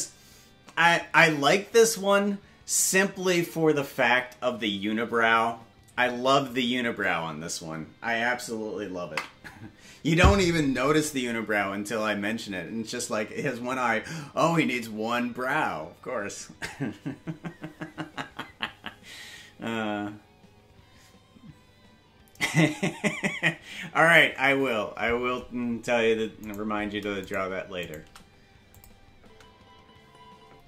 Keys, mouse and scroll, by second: 27.3 right click, 28.7 click, 29.2 space.